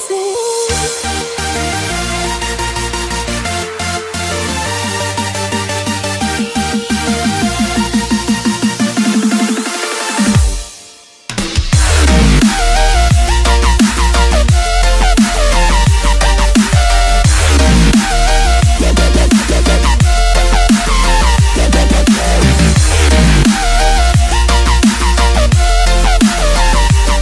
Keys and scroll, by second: 0.7 ctrl+space, 1.1 F1, 1.4-5.8 typing, 6.9 space, 8.6-16.7 typing, 17.8-19.7 typing, 20.9-27.2 typing, 26.4 F1.